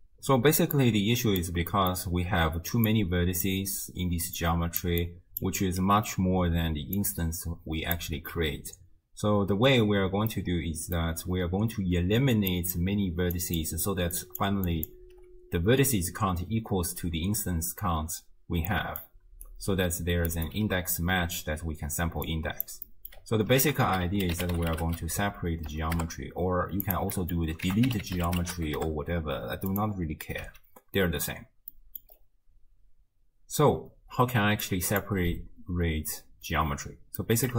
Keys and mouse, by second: 0.7 click, 1.8 click, 2.3-7.0 typing, 2.9 click, 4.4 right click, 5.0 right click, 8.0 d, 8.0 d, 10.4 click, 11.2-15.2 d, 12.5 click, 13.6 click, 14.8 click, 18.9 click, 18.9 middle click, 18.9 right click, 19.1 d, 19.5 click, 20.3 d, 20.5-20.9 drag, 21.4-22.1 d, 22.3 click, 22.9 click, 23.6 ctrl+a, 25.2 Down, 25.4 Down, 27.2 click, 27.7 ctrl+a, 30.5 x, 31.7 click, 34.7 right click, 34.9 right click, 37.3 click.